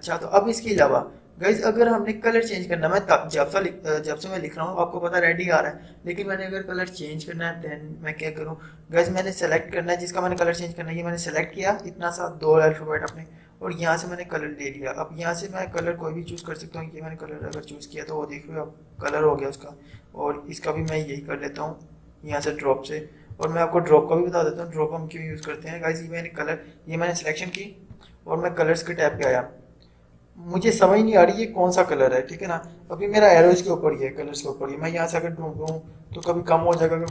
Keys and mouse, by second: 0.8 click, 9.2-13.0 drag, 15.8-29.2 drag, 35.6-37.1 drag.